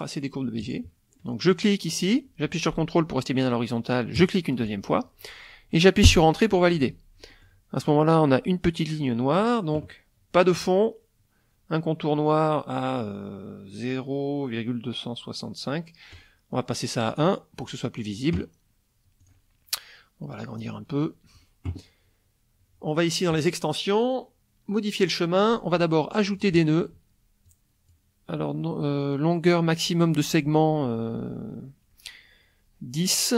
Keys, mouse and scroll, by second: 0.6 click, 1.5 click, 4.2 ctrl+click, 6.0 Return, 7.3 middle click, 16.1 right click, 17.1 click, 17.6 middle click, 19.2 click, 20.6-21.5 drag, 23.3 click, 26.3 click, 27.5-28.1 drag.